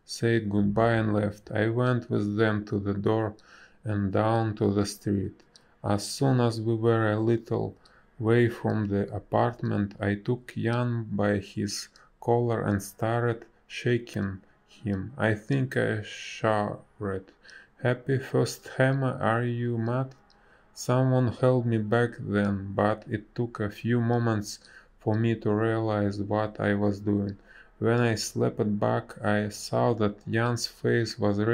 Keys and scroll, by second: 2.9 space, 7.1 space, 8.3 b, 9.0 space, 18.5 space, 22.9 ctrl+z, 22.9 space, 31.1 space.